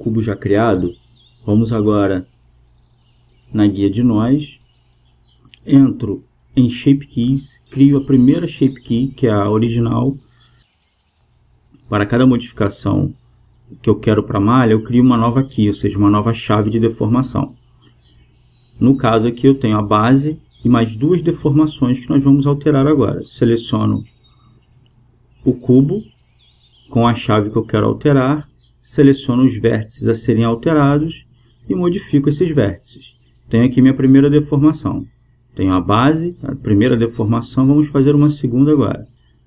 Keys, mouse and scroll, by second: 5.0-7.0 drag, 7.3-10.8 drag, 11.6-14.5 drag, 19.4-22.3 drag, 22.4 click, 22.9 BackSpace, 26.2-28.1 drag, 28.6 Tab, 30.1-36.0 middle drag, 33.1-35.8 right drag, 35.4-38.9 drag.